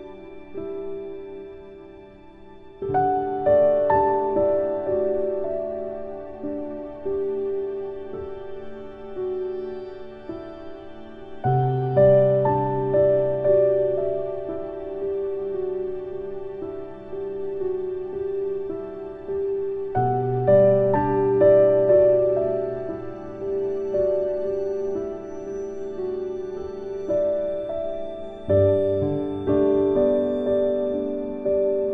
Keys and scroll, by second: 0.1 ctrl+k, 9.3 ctrl+k, 13.9 ctrl+k, 18.9 ctrl+k, 27.9 ctrl+k.